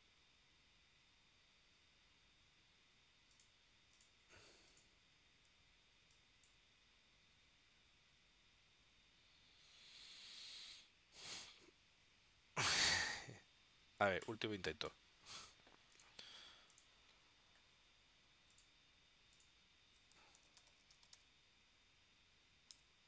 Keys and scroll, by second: 20.2-21.8 typing, 22.8 Tab.